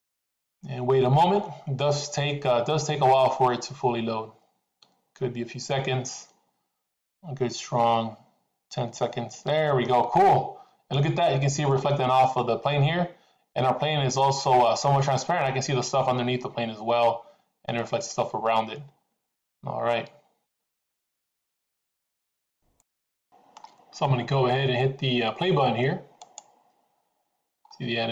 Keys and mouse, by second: 9.9-10.9 middle drag, 11.7-20.5 middle drag, 21.2-22.6 middle drag, 22.9-23.9 middle drag, 26.1 click.